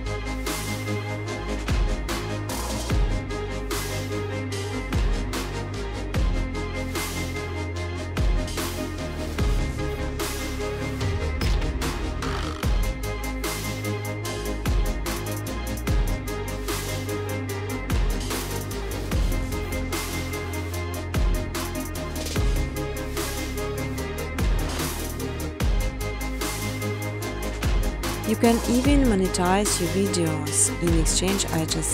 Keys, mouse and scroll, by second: 0.1 click, 1.3-2.0 typing, 2.1 click, 3.8-5.1 typing, 3.8 click, 7.6 click, 7.8 click, 9.8 click, 11.4 click, 12.3 click, 12.8-15.7 typing, 14.1 Tab, 17.1-18.7 typing, 20.8-21.6 typing, 20.9 click, 21.1 click, 22.7 click, 23.9 click, 24.9 click, 25.3-29.9 typing, 26.8 Tab.